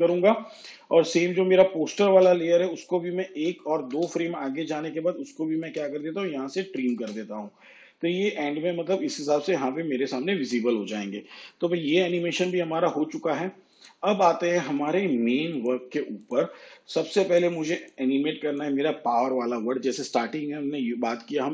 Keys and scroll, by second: 3.3 ctrl+Right, 6.8 alt+[.